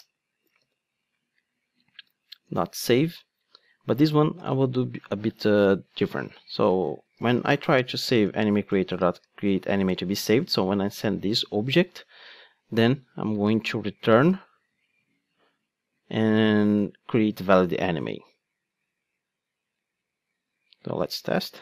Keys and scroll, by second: 0.6 super+v, 2.5 Return, 8.4 Return, 15.1 super+x, 21.0 ctrl+d.